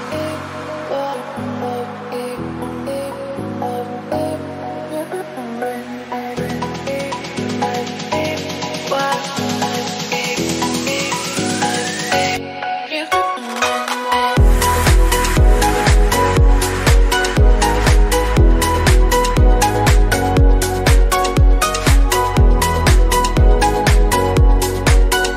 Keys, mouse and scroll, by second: 0.3 g, 1.3 KP_Decimal, 1.7 scroll down 4, 2.0 scroll up 1, 2.4-5.5 typing, 6.7 scroll down 1, 6.9 click, 7.1 middle click, 8.0 scroll down 4, 8.2-8.8 scroll up 1, 8.8 KP_3, 9.2-9.5 scroll down 1, 9.5 click, 9.9-10.2 scroll up 1, 10.2-11.9 drag, 11.9 scroll down 2, 12.0 middle click, 12.8 KP_3, 13.0-14.5 drag, 14.5-15.7 middle drag, 15.7 KP_3, 16.0-16.9 scroll up 2, 16.2 shift+middle click, 16.9-19.7 drag, 19.7 scroll down 1, 19.8 middle click, 20.5 /, 21.6 click, 22.0 scroll down 1, 22.2-23.2 middle drag, 23.2-23.8 scroll up 2, 23.8 alt+z, 24.0 click, 24.2 middle click, 25.0 scroll up 1, 25.3 scroll down 1.